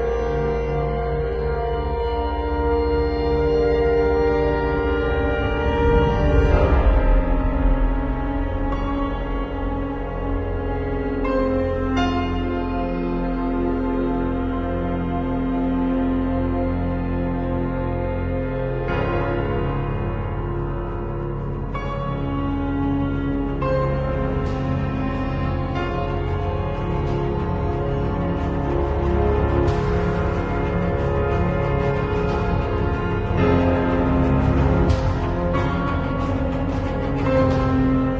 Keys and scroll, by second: 1.7 Return, 16.2 x, 16.5 alt+Delete, 17.1 alt+x, 19.1 alt+Delete, 26.2 z, 26.9 space, 27.6 r, 28.7 b, 28.9 space, 31.9 space, 33.1 [, 36.7 [, 37.8 [.